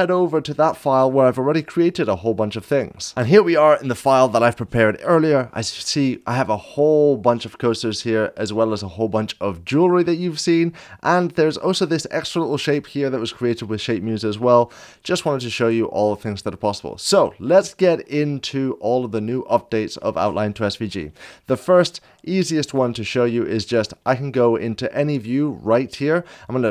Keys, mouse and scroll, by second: 0.0 click, 4.8 middle click, 7.9-8.5 shift+drag, 7.9 scroll up 1, 9.8 scroll down 1, 10.5-11.2 shift+middle drag, 10.5 scroll down 1, 11.6-17.1 drag, 17.2 shift+middle click, 18.8-19.5 drag, 23.2 middle click, 23.7 scroll down 1, 24.2 scroll up 1, 24.5 middle click, 24.7 scroll down 2.